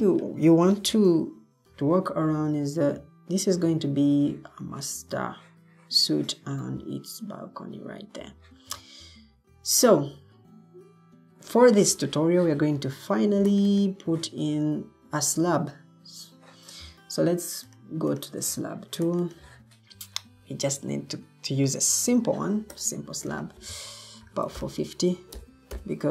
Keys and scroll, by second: 1.8 Escape, 23.9-25.6 typing.